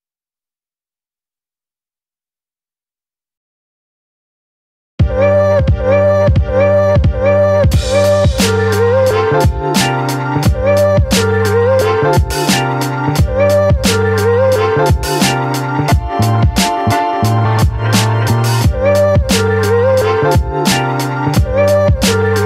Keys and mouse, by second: 1.2 right click, 1.9 middle click, 3.0-3.6 typing, 3.6 click, 4.2 ctrl+z, 4.9 click, 5.5 click, 5.9 ctrl+z, 6.7 click, 7.6 click, 8.3 ctrl+z, 9.7 ctrl+z, 9.7 click, 10.2 click, 11.7 middle click, 11.8 click, 11.8 right click, 13.0 click, 13.7 a, 14.7-15.7 middle drag, 15.9 middle click, 16.4 shift+middle click, 17.4 ctrl+i, 17.9 b, 19.2 b, 20.1 b, 21.0 middle click, 21.5 b.